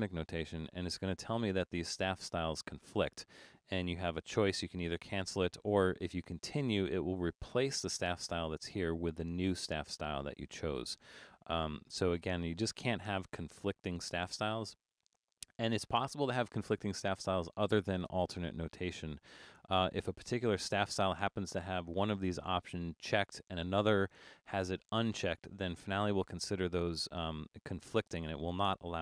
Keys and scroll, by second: 0.1 r.